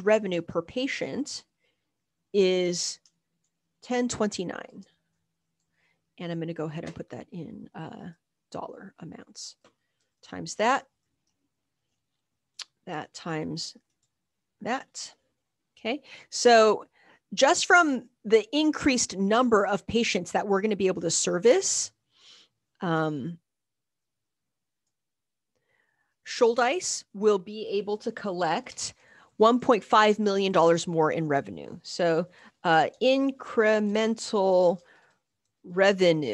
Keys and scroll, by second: 0.4-1.1 typing, 1.1 shift+Left, 2.4-3.4 typing, 4.4-5.2 typing, 10.0 typing, 10.2 Return, 11.0 shift+Right, 11.2 Down, 11.9 =, 12.9 shift+8, 13.9 Return, 14.0 \, 14.9 Escape, 24.0 Left, 24.5 shift+Right, 28.4 =, 28.7 Return, 29.3 Up, 29.3 Right, 29.6 Right.